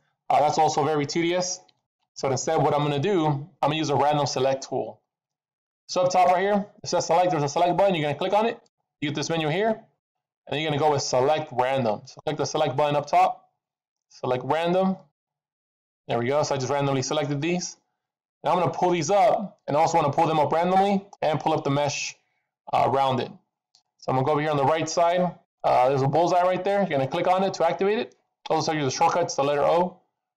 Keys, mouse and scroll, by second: 0.2 shift+click, 1.8 alt+a, 8.4 click, 18.5 middle click, 18.5-18.9 scroll down 1, 20.0-21.6 scroll up 2.